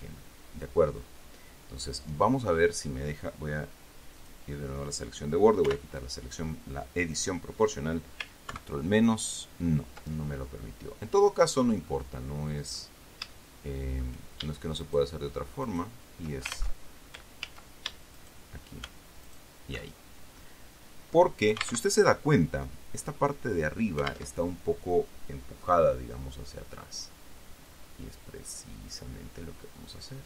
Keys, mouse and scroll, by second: 0.5-2.2 drag, 2.4-2.7 scroll up 1, 4.5 click, 6.0 o, 8.8 ctrl+KP_Subtract, 10.9-11.9 middle drag, 11.9 scroll up 1, 12.2-13.3 middle drag, 13.6 shift+middle click, 15.2 shift+right click, 16.0 shift+right click, 17.8 ctrl+z, 18.5 shift+right click, 19.6 alt+shift+right click, 20.3-20.7 alt+shift+scroll down 1, 20.7-21.7 right drag, 22.2 alt+Tab, 24.7 alt+Tab, 26.0 middle click, 28.0-30.2 drag.